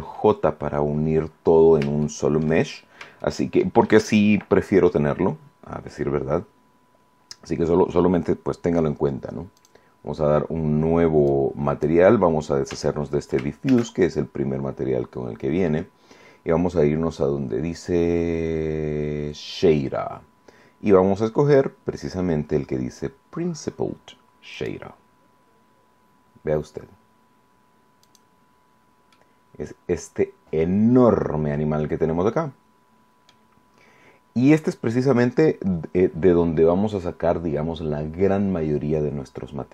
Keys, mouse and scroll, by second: 0.7-1.0 scroll up 1, 1.4-2.0 scroll down 2, 2.0 shift+click, 2.2 shift+middle click, 2.6 shift+scroll up 3, 3.1 shift+middle click, 4.0 shift+right click, 9.5 click, 11.2 click, 12.6 x, 13.6 shift+a, 24.4 click, 28.0 click, 29.0-33.4 middle drag.